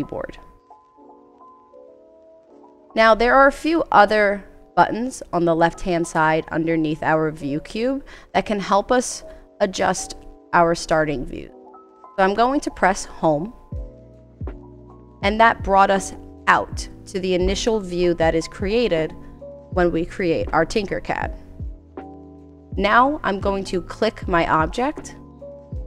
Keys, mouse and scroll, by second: 24.1 click.